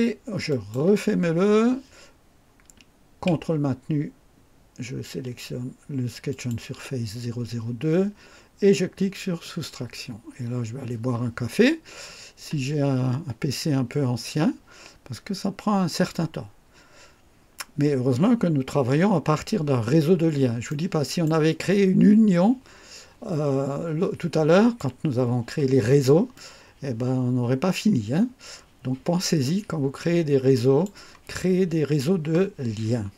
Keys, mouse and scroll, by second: 0.4 click, 6.2 ctrl+click, 9.4 click, 19.9 scroll up 1, 20.6-21.4 right drag, 21.6-24.9 drag, 26.3-31.0 drag, 32.8-33.1 scroll up 1.